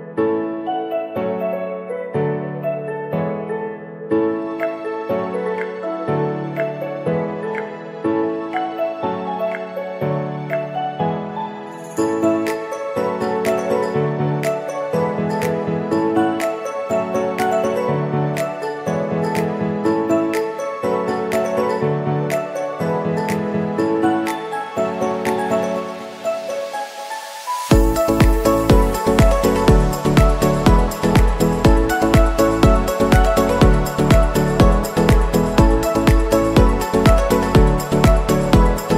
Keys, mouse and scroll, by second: 23.5 n, 23.6 scroll down 2, 23.7 middle click, 23.9-24.2 scroll up 3, 24.1 click, 24.2 middle click, 24.5 shift+click, 24.7 middle click, 25.3 i, 26.1 ctrl+r, 26.9 s, 28.4 Tab, 28.8 click, 28.9 click, 29.2 right click, 29.7 Tab, 29.8 s, 30.3 s, 30.9 Tab, 31.7 shift+middle click, 31.9 g, 32.5 s, 33.1 scroll down 5, 33.2 middle click, 33.5 click, 33.6 middle click, 33.9 scroll down 2, 34.0 middle click, 34.4 KP_7, 34.8 click, 35.1 g, 36.2 s, 36.4 middle click, 36.9 middle click, 36.9 click, 37.1 scroll up 3, 37.1 middle click, 37.5 scroll down 2, 37.5 middle click, 38.2 shift+middle click, 38.3 scroll up 2, 38.4 middle click, 38.7 scroll down 3, 38.8 middle click.